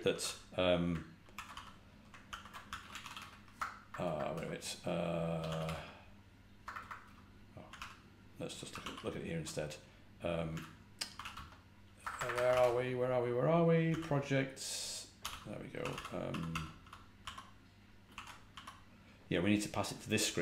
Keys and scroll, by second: 0.0-8.2 typing, 1.2 ctrl+w, 2.2 ctrl+p, 7.0 Return, 8.6 ctrl+a, 8.7 ctrl+l, 10.4-14.0 typing, 15.1-18.4 typing.